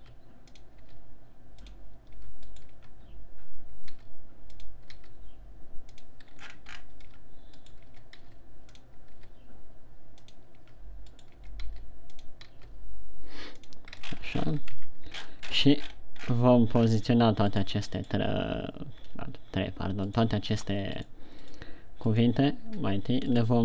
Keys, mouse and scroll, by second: 0.1 Tab, 0.4 w, 1.3 w, 2.6 Tab, 2.9 right click, 3.3 Tab, 4.5 w, 5.5 w, 6.9-7.5 shift+scroll down 9, 7.9 Tab, 7.9 right click, 8.3 Tab, 8.6 w, 9.5 w, 11.0 Tab, 11.6 right click, 11.8 Tab, 12.1 w, 13.0 w, 14.6-15.2 shift+scroll up 9, 15.2 Tab, 15.6-16.6 shift+scroll up 8, 16.8-17.7 scroll down 10, 17.9 right click, 18.5 right click, 20.6 right click, 21.0 right click, 21.4 right click, 21.8 right click, 22.7 right click, 23.1 b.